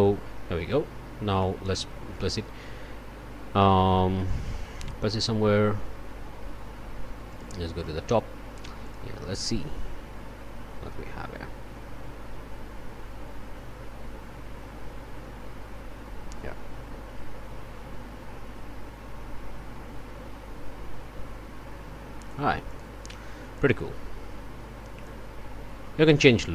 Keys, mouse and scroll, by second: 1.4 click, 4.2 click, 5.7 o, 7.3 click, 7.8 click, 8.8 click, 22.7 click, 26.1 click.